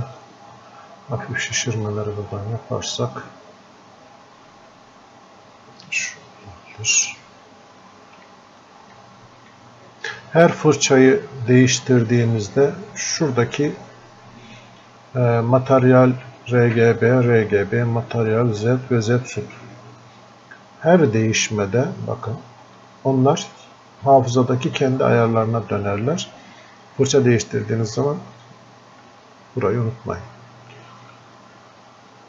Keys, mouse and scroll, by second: 0.6 click, 5.7 click, 8.3 s, 9.0 s, 9.5 s, 11.5-14.6 drag, 21.8 click, 24.3-29.8 drag, 30.5-32.2 drag.